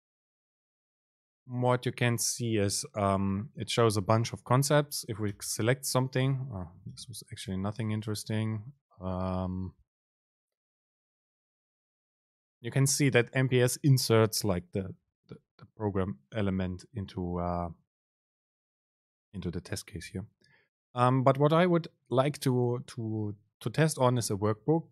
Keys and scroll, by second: 6.4 BackSpace, 7.6 Escape, 8.0 super+space, 15.2 BackSpace, 20.1 BackSpace, 24.5 super+space.